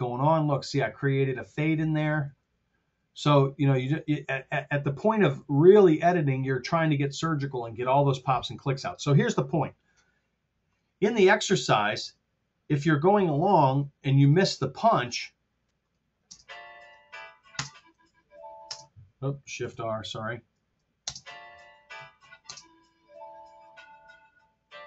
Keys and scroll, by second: 2.1 r, 4.1 y, 5.3 t, 6.8 r, 13.5 super+z, 16.3 space, 17.6 super+space, 18.8 space, 19.5 shift+r, 21.0 space, 22.5 super+space.